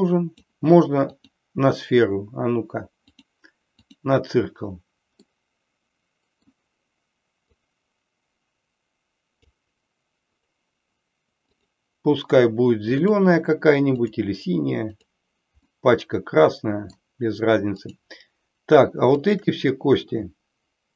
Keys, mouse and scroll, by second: 1.1-3.2 drag, 3.9 click, 5.2-6.5 middle drag, 5.2 scroll up 1, 7.4-9.5 drag, 11.5 click, 13.1-14.2 drag, 14.9 click, 15.7-16.9 middle drag, 19.2 shift+click.